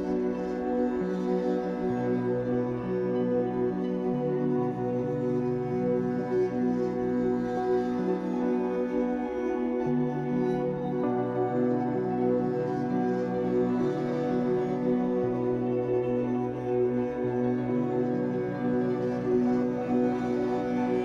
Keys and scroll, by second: 0.5 Escape, 0.7 3, 1.6 w, 13.8 r, 16.4 Escape, 18.1 Escape, 18.9 w.